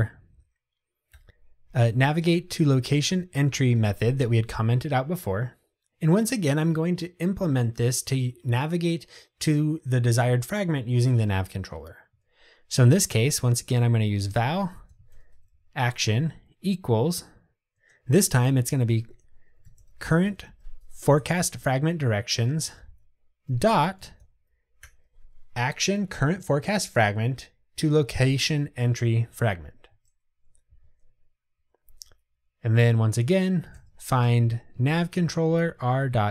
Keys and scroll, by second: 1.2 Delete, 3.2 Tab, 21.7 Return, 34.8 Tab.